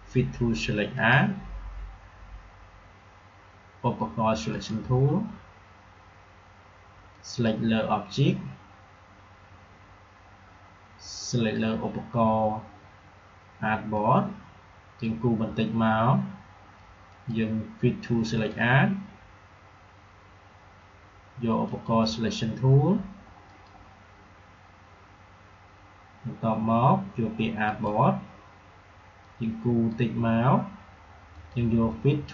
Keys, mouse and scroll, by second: 0.9 click, 4.4 click, 7.1-10.0 drag, 11.3 click, 13.9-17.0 drag, 21.6 click, 27.6-31.3 drag.